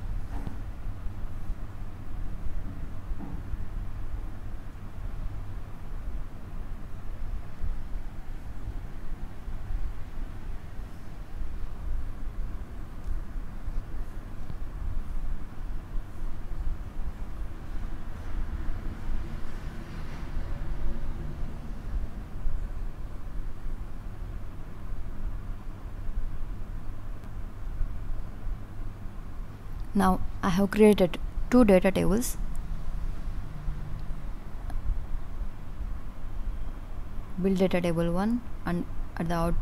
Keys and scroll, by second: 4.2 Down, 19.6 Right.